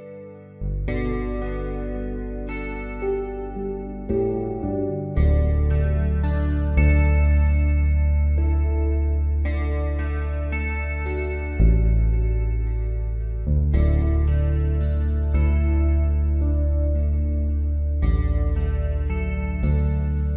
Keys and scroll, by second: 5.2 ctrl+s.